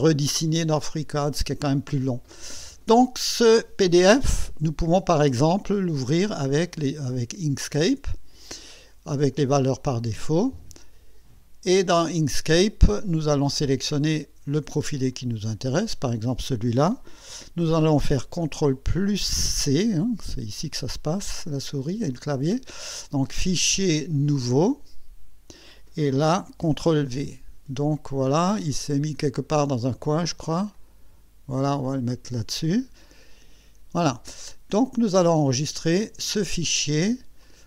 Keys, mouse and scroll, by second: 4.5 right click, 7.6 click, 9.5 click, 11.7 click, 12.9 scroll up 2, 15.1 click, 19.3 ctrl+c, 23.5 click, 24.3 click, 26.6 ctrl+v, 28.3-28.8 scroll down 2, 29.0-29.6 scroll up 4, 30.7-32.6 drag, 33.0-33.3 ctrl+scroll up 2, 35.5 click, 37.4 click.